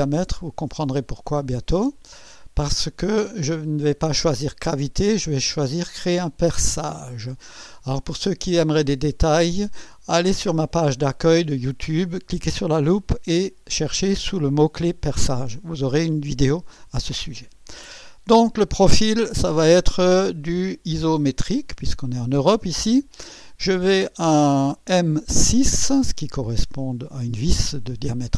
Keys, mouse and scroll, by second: 1.3 click, 7.0 click, 19.1 click, 21.1 click, 24.2 click.